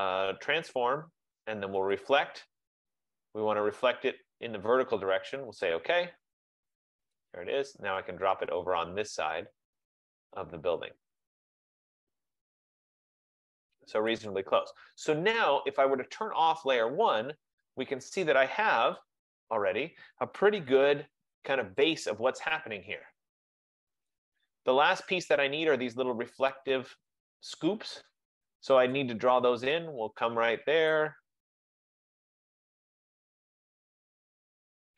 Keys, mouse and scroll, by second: 2.0 click, 5.9 click, 14.4 click, 16.5 click, 19.1 click, 21.1 click, 21.2-21.7 click, 21.5 click, 21.8 click, 24.8 click, 28.3 F15, 29.3 click, 31.0 click, 34.1 click.